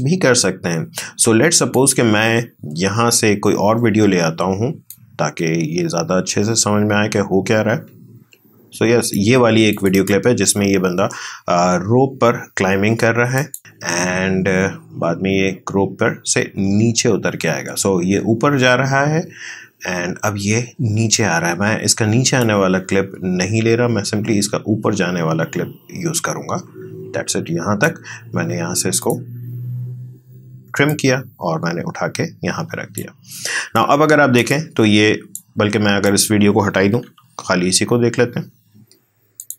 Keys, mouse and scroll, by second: 1.7 click, 4.9-9.7 drag, 13.4 click, 13.6 space, 21.4 space, 22.5-36.1 drag, 37.1 Delete, 39.4-39.5 drag.